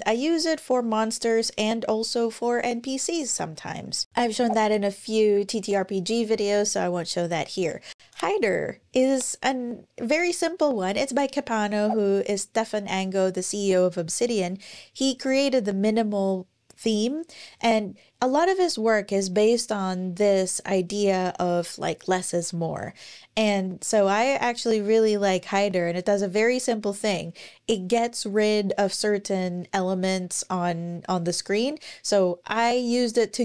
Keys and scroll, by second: 3.2 Escape, 3.9 super+,.